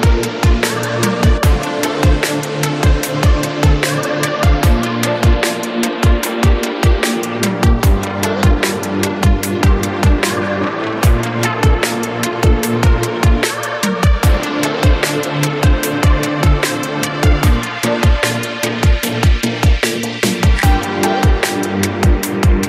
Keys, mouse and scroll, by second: 0.4-2.1 shift+middle drag, 2.1-2.5 scroll up 1, 2.5 shift+middle click, 2.7 shift+scroll up 1, 3.0 click, 3.6 shift+click, 4.3 ctrl+p, 5.2 scroll down 3, 5.5 shift+middle drag, 5.8 click, 6.0 scroll up 1, 6.5 click, 6.9 shift+drag, 7.7-8.7 drag, 8.7-9.1 scroll down 8, 9.2-11.2 shift+middle drag, 11.3-15.9 drag, 15.9-16.3 scroll up 7, 16.3-17.0 shift+middle drag, 17.0-17.3 scroll up 1, 17.3 shift+middle drag, 17.6 drag, 18.0 click, 18.6 shift+drag, 19.4 ctrl+p, 20.6 click, 20.8 scroll down 1, 21.1-22.3 shift+middle drag, 22.3 scroll up 4.